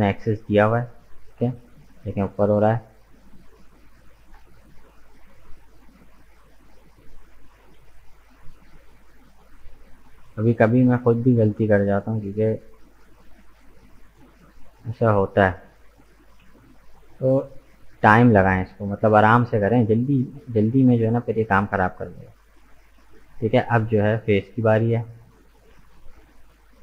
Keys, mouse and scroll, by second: 3.1-3.7 scroll up 2, 3.7 right click, 4.8 shift+middle click, 5.1-5.5 scroll up 1, 5.5-8.4 middle drag, 8.4-9.5 drag, 9.5 right click, 9.8-11.0 middle drag, 11.0 g, 14.1-15.9 middle drag, 15.9 g, 18.9-20.9 middle drag, 20.9 g, 22.8-24.6 middle drag, 24.6 click, 25.6 right click, 26.1 shift+right click.